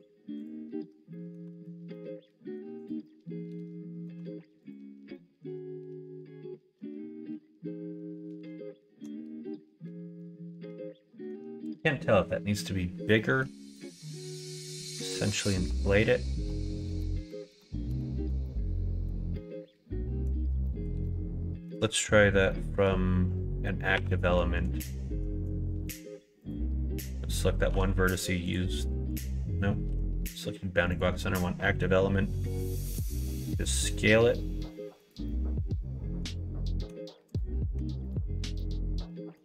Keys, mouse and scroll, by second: 0.3 click, 1.1 middle click, 1.5 alt+z, 1.9 middle click, 3.0-4.0 middle drag, 4.2 Tab, 5.1-9.0 middle drag, 10.1-11.3 middle drag, 13.2 middle click, 13.7 middle click, 14.3 middle click, 15.3 middle click, 15.7 Tab, 16.9 ctrl+z, 17.1 ctrl+z, 17.5 ctrl+z, 17.9 ctrl+z, 18.4 middle click, 19.3 middle click, 20.6 middle click, 21.0 shift+middle click, 22.5 middle click, 23.9 2, 25.1 1, 25.9 shift+click, 27.7 ., 29.9 ., 31.6 middle click, 32.8 s, 35.2-36.8 middle drag, 37.7 Tab, 38.0 click, 38.5 middle click.